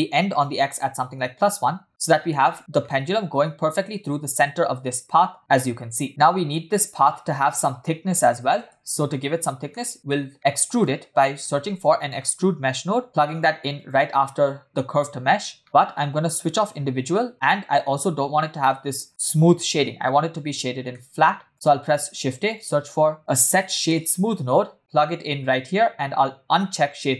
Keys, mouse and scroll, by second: 0.3-1.3 drag, 2.3 shift+middle drag, 2.8 shift+middle drag, 3.1 scroll down 1, 3.3-4.3 scroll up 2, 4.3 space, 6.1-7.0 scroll down 3, 7.0 scroll up 1, 7.1 scroll down 1, 7.2-8.2 scroll up 2, 8.6 space, 9.1-9.7 scroll down 1, 9.7 scroll down 1, 9.7 middle click, 10.2 scroll down 1, 10.9 click, 11.5 shift+a, 14.7 click, 15.6 middle click, 15.6-16.4 scroll up 2, 16.4 click, 18.0-18.3 scroll up 3, 18.4-19.1 shift+middle drag, 19.1-20.8 scroll down 2, 21.0 middle click, 21.5 click, 21.9 shift+a, 26.6 click.